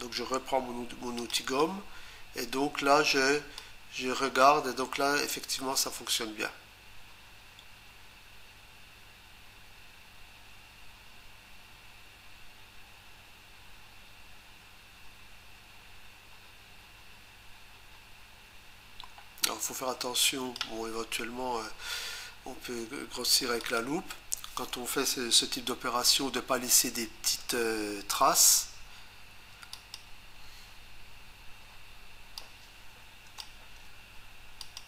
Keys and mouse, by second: 1.2 click, 1.4 click, 3.6 click, 23.6 click, 29.8 click, 32.4 click, 33.4 Return, 33.9 Return, 34.6 click.